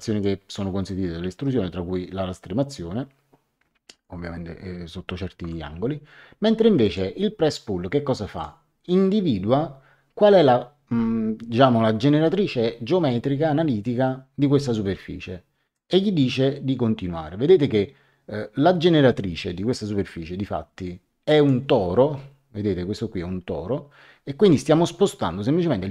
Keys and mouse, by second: 0.8 click, 5.4 Escape, 6.8 click, 8.3 click, 15.7 click.